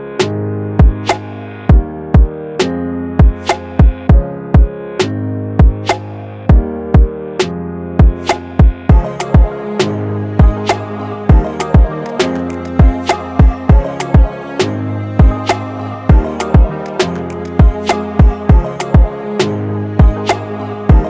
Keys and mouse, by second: 11.4-13.9 drag, 16.6-19.1 drag, 20.6 click.